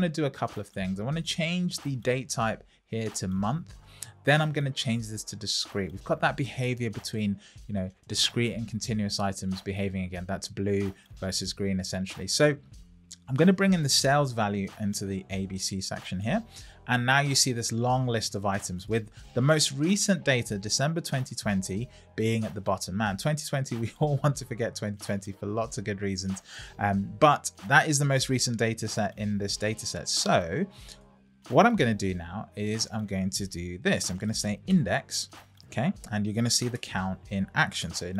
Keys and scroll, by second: 35.7 Down, 36.7 Return.